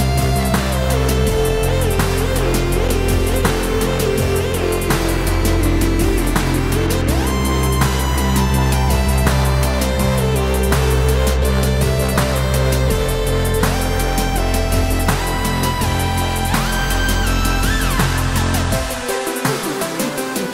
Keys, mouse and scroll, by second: 0.0-1.3 scroll down 4, 0.5-8.1 middle drag, 1.3-1.7 scroll down 1, 2.4 scroll down 2, 4.4-4.9 scroll down 2, 4.9-5.4 scroll up 2, 6.9 scroll up 1, 8.1 shift+right click, 9.6 shift+a, 10.1 s, 10.8 click, 11.0 KP_Decimal, 11.6-11.9 scroll down 1, 12.2 g, 13.3 click, 13.4-13.8 scroll down 1, 13.8-16.9 middle drag, 14.2 scroll down 1, 15.0 s, 16.9 click, 17.0 g, 18.4 click, 18.5-20.5 middle drag, 18.8-20.5 scroll up 2.